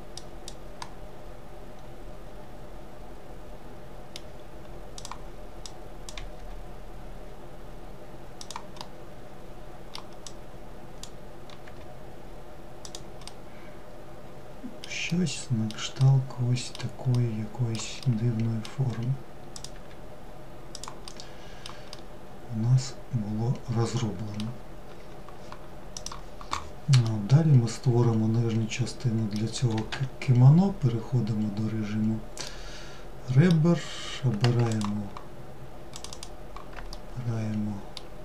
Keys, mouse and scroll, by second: 3.8 click, 7.7-9.1 middle drag, 9.1 click, 12.1-18.4 middle drag, 18.4 click, 19.9-23.8 middle drag, 26.1-29.0 middle drag, 29.0 2, 30.1-31.5 scroll up 1, 31.5-33.8 middle drag, 33.8 alt+click, 35.0 alt+click, 35.2 alt+click, 36.0-38.0 middle drag, 38.0 alt+click.